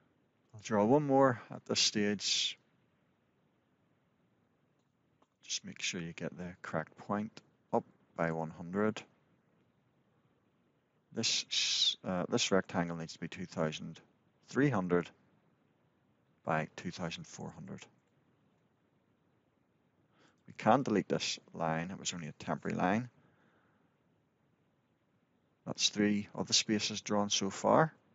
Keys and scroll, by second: 8.5 Return, 21.5 Delete.